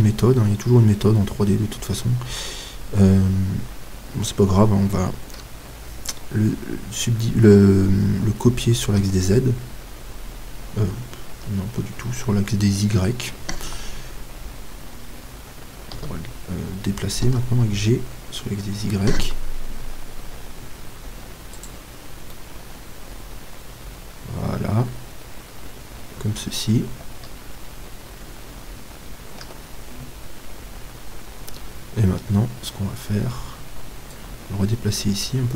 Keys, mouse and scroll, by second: 13.6 y, 15.9 d, 17.2 g, 21.7-23.4 drag, 22.3-24.3 middle drag, 29.4 KP_7, 32.8-34.1 middle drag, 34.1-35.5 drag.